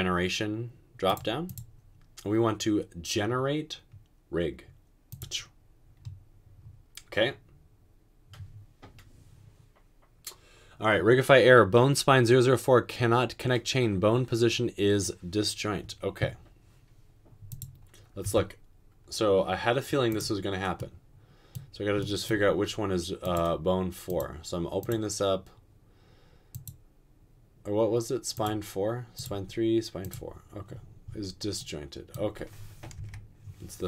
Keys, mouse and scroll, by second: 18.3 Tab, 33.0 Return.